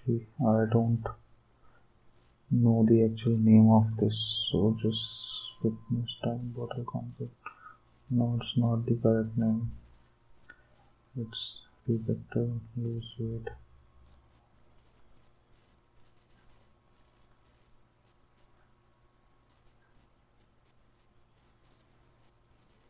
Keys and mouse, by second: 3.2 click, 7.1 click, 8.6 click, 14.0 click, 21.7 click.